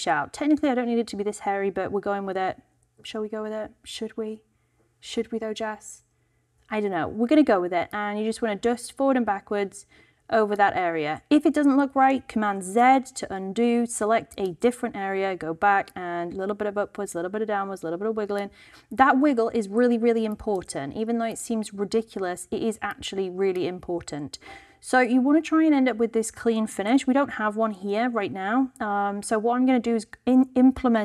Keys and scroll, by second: 12.6 super+z, 13.6 alt+super+z, 26.6 super+z.